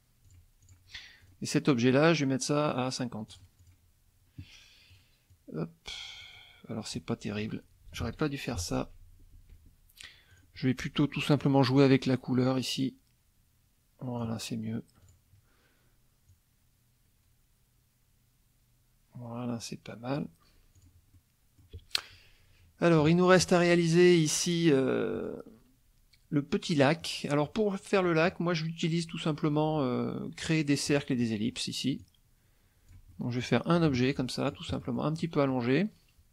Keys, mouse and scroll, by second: 0.2 click, 0.6 click, 1.2 click, 2.7 right click, 3.3 click, 3.6 click, 4.9 click, 5.3-6.4 drag, 7.0 middle click, 8.0 ctrl+z, 9.3 ctrl+z, 10.3 click, 11.4 click, 12.8-14.4 drag, 15.0 click, 16.3-20.3 drag, 20.7 click, 21.1 middle click, 23.0 KP_Subtract, 25.1 middle click, 27.0 middle click, 28.0 middle click, 30.9 click, 32.0 click, 33.1 middle click, 33.8 F1, 33.9 click, 34.7 middle click, 35.2 middle click.